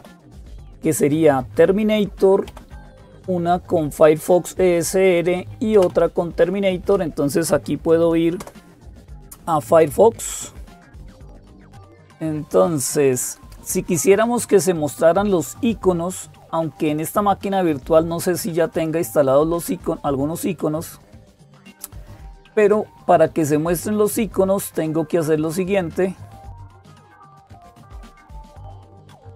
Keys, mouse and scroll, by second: 0.0-29.3 typing, 2.3 Down, 5.6 Down, 6.7 Up, 8.2 Return, 11.7 Up, 12.5 click, 16.7 click, 22.2-23.3 scroll down 2, 23.3-27.7 scroll down 1, 27.7-29.3 scroll down 1.